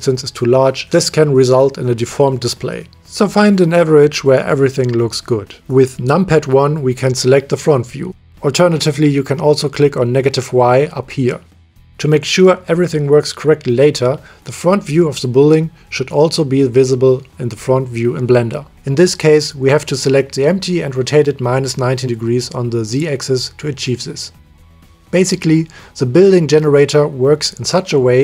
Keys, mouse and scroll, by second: 0.9 n, 1.4 middle click, 3.6 middle click, 3.9 click, 4.1 middle click, 5.9 KP_1, 13.0 middle click, 14.0-25.4 middle drag, 25.4 click, 25.6-28.2 middle drag.